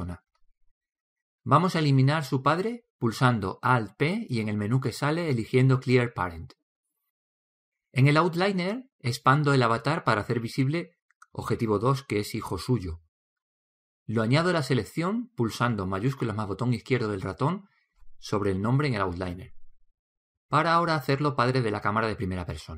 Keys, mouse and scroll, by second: 1.4 right click, 5.9 alt+p, 11.0-14.0 drag, 18.7-20.5 drag.